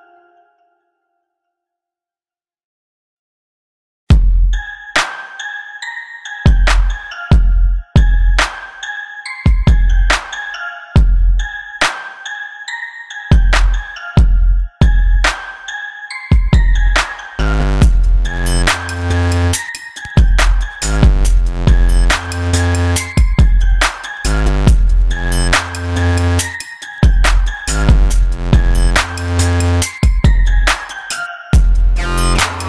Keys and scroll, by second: 0.1 ctrl+z.